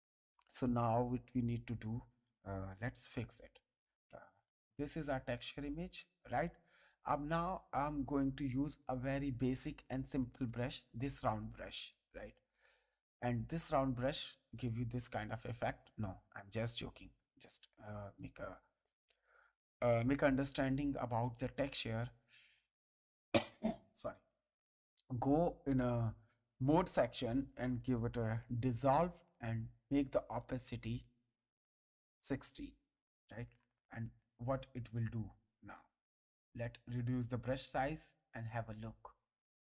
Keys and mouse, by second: 5.3 click, 8.7 click, 11.5 ctrl+space, 11.7 ctrl+click, 13.9 click, 16.2 ctrl+z, 18.1 click, 21.2 click, 24.5 click, 27.2 click, 29.7 click, 33.5 space, 34.0 ctrl+click, 39.1 click.